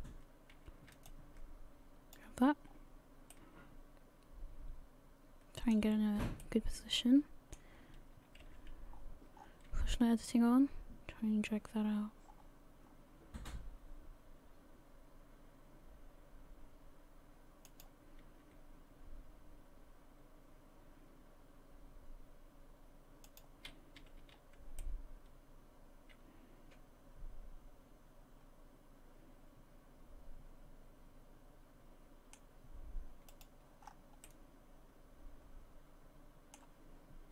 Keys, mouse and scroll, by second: 1.1 shift+click, 2.7 scroll down 4, 3.3 middle click, 8.4 g, 24.0 a, 24.2 a, 24.8 middle click, 33.3 click, 33.8-34.2 scroll up 4, 34.2 middle click.